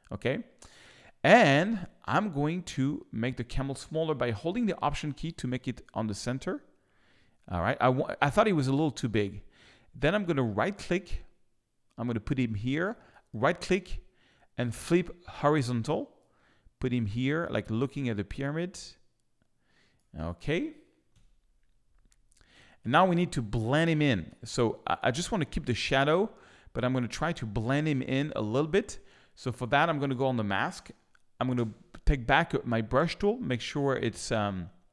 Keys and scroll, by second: 21.1 Return, 31.5 b.